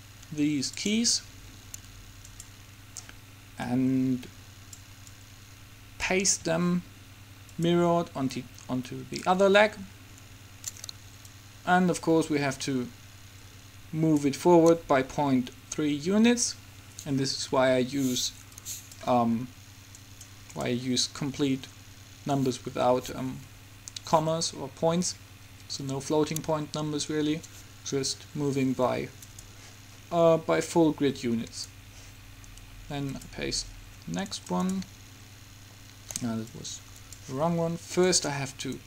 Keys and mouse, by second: 2.4-7.1 drag, 7.7-9.4 drag, 9.4-11.1 right drag, 11.4-13.4 drag, 18.7-20.4 drag, 20.1-23.5 right drag, 29.4-32.4 drag, 32.4 middle click, 33.2-34.4 drag, 38.7-38.8 right drag.